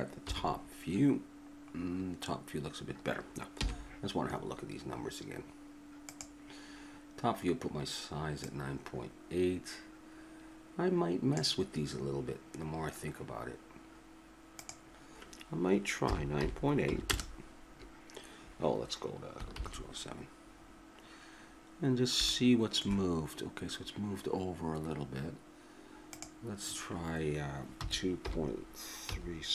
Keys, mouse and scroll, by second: 0.3 KP_7, 3.6 n, 6.0-10.3 drag, 14.6-19.5 drag, 20.6-24.8 middle drag, 26.1-29.5 drag.